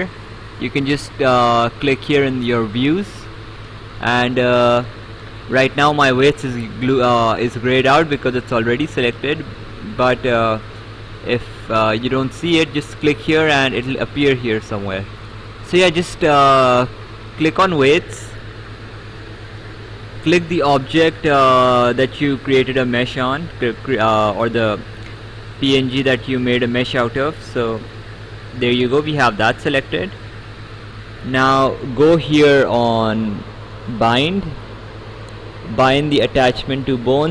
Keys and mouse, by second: 15.4 click, 17.3 click, 24.4 right click, 27.5 click, 29.4 right click.